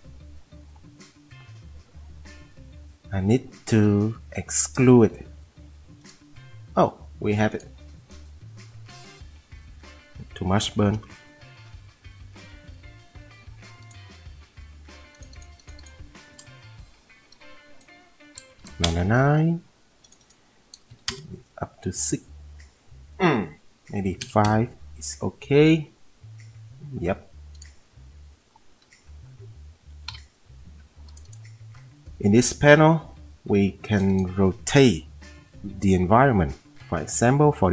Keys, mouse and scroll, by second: 10.9 F10, 11.1 F10, 18.4 9, 18.5 9, 18.6 9, 18.8 Return, 20.9 6, 24.1 5, 30.1 m.